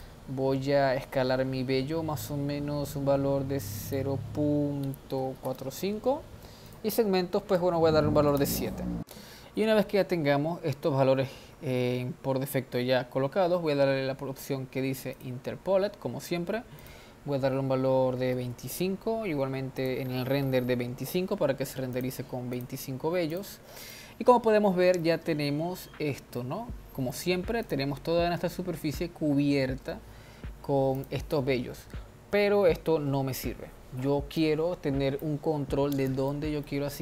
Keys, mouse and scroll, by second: 0.0-3.1 drag, 3.9-9.0 drag, 10.9-11.5 scroll down 1, 11.5-12.6 scroll down 4, 15.2 click, 16.1-16.4 scroll down 4, 16.8-22.1 drag, 22.6 click, 23.3 click, 24.0-25.4 middle drag, 25.4-25.9 scroll up 2, 25.9-26.4 scroll down 1, 26.4-27.6 middle drag, 27.6 drag, 30.9 click, 34.4-35.5 drag, 35.5-36.4 scroll down 2, 36.4-37.0 middle drag.